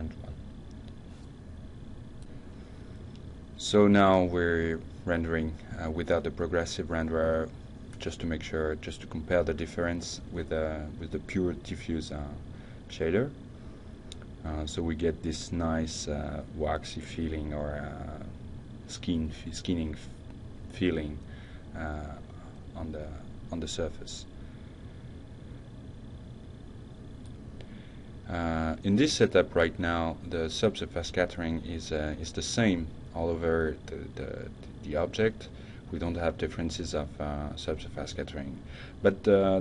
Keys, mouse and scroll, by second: 1.1 click, 1.6 click, 5.5-9.3 drag, 24.2-28.8 drag.